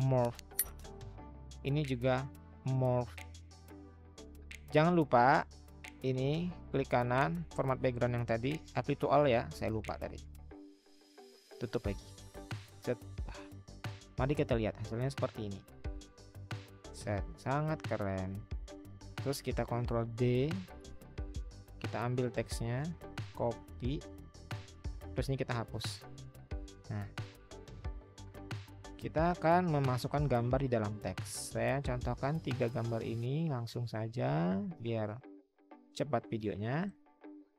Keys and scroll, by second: 19.8 ctrl+d, 23.7 ctrl+c, 25.5 Delete.